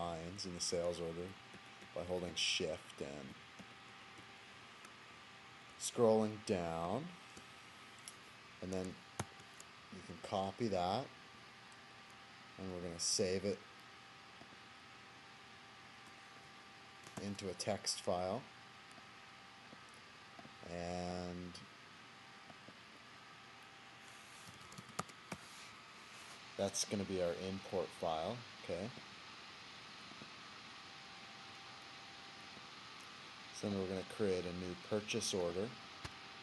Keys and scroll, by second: 9.2 ctrl+c, 17.6 ctrl+v.